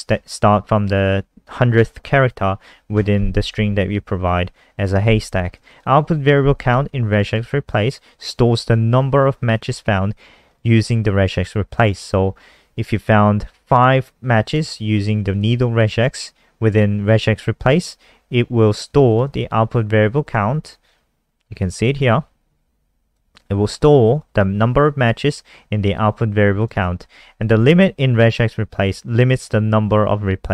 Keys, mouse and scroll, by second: 5.5 click, 5.6 click, 7.0 click, 7.2 click, 10.5 click, 10.6 click, 15.2 click, 15.3 click, 19.0 click, 19.2 click, 20.2-21.1 scroll up 6, 22.0 click, 23.4-23.9 scroll down 5, 24.0 scroll up 1, 25.1 scroll down 1, 26.0-26.5 scroll down 1, 26.5 click, 26.7 click, 27.4 click, 27.5 click.